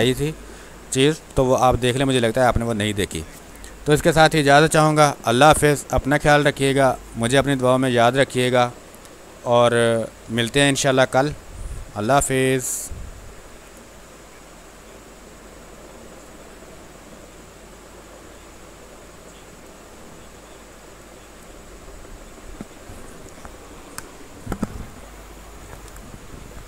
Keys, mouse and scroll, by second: 14.7-24.7 drag.